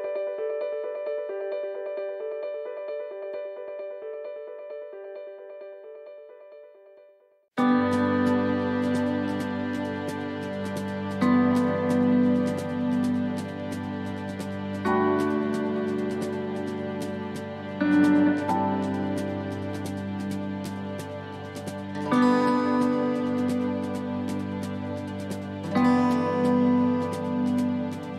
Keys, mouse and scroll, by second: 0.5 scroll down 1, 1.3 middle click, 1.3 scroll down 3, 2.1 scroll up 2, 3.5 l, 4.0 l, 4.3 l, 6.9 l, 7.0 middle click, 8.3 l, 9.1 l, 10.0 l, 11.1 ctrl+z, 11.6 middle click, 12.0 shift+middle click, 12.6-13.0 scroll up 4, 13.0 middle click, 13.6 shift+middle click, 14.4 middle click, 15.7 shift+middle click, 16.9 l, 18.4 l, 19.2 middle click, 20.3 l, 20.9 middle click, 22.5 l, 24.0 l, 25.4 middle click, 25.4 l, 28.0 middle click, 28.0 scroll up 1.